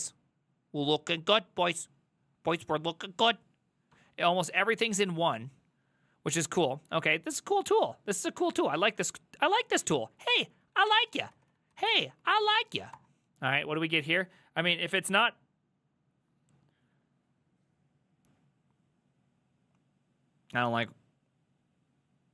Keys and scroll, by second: 4.0 Up, 4.4 ctrl+Left, 5.1 ctrl+Left, 5.1-5.8 ctrl+Left, 5.9 ctrl+Right, 6.6 ctrl+Right, 6.6 ctrl+Right, 7.0 ctrl+Right, 7.3 ctrl+Right, 7.4 ctrl+Left, 8.1 ctrl+Left, 8.1 ctrl+Left, 8.6 ctrl+Right, 9.1 ctrl+Right, 9.7 ctrl+Right, 9.8 ctrl+Right, 10.0 ctrl+Right, 10.4 ctrl+Right, 10.5 Left, 10.8 ctrl+w, 11.0-12.3 typing, 13.0 Return.